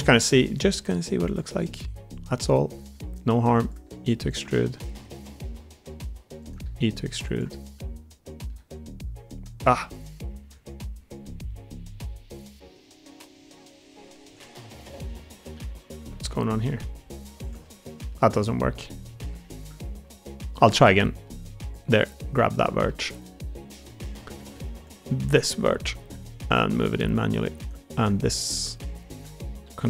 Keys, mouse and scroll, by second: 0.2 g, 1.4 e, 2.4 click, 2.7 g, 3.8 e, 4.4 middle click, 4.9 g, 6.3 click, 6.5 e, 7.1 click, 7.7 middle click, 8.5 g, 9.6 middle click, 10.4 Tab, 11.1-12.5 middle drag, 13.5-14.0 middle drag, 14.1 Tab, 15.0 2, 15.4 1, 15.7 click, 16.3 g, 17.5 middle click, 18.3 middle click, 19.0 middle click, 19.3 shift+middle click, 20.0 middle click, 20.9 middle click, 22.3 middle click, 22.8 middle click, 23.9 middle click, 24.3 alt+z, 24.6 click, 25.1 click, 25.5 middle click, 25.9 alt+z, 26.3 middle click, 26.7 g, 29.5 ctrl+r.